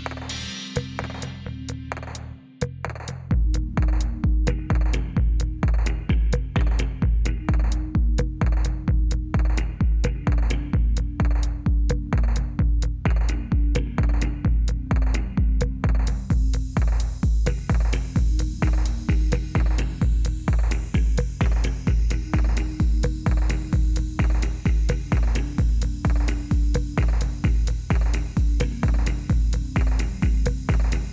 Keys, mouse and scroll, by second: 2.5 click, 2.7 d, 3.3 click, 3.6 d, 4.3 d, 4.6 click, 5.1 click, 5.9 click, 6.6 click, 6.6 d, 7.1 click, 7.4 d, 7.5 click, 7.9 d, 8.0 click, 8.2 d, 8.5 click, 8.8 click, 9.8 d, 10.1 click, 11.3 click, 11.4 click, 12.0 click, 12.4 click, 13.1 click, 13.2 shift+d, 13.6 click, 14.0 click, 14.7 click, 15.0 click, 15.4 click, 15.5 click, 16.2 click, 16.6 click, 16.9 click, 17.6 click, 17.8 click, 18.2 click, 18.4 click, 18.6 click, 18.8 click, 19.1 click, 19.6 click, 20.0 click, 20.3 click, 20.5 click, 21.1 click, 21.8 click, 22.1 click, 22.4 click, 22.4 click, 23.0 click, 23.3 click, 23.6 click, 23.7 click, 23.9 click, 24.0 click, 24.3 click, 24.6 click, 25.2 click, 26.0 click, 26.1 click, 26.5 click, 26.8 click, 27.3 click, 27.5 click, 28.2 click, 29.4 click, 29.5 click, 30.0 click, 30.4 click, 30.6 click, 30.9 click.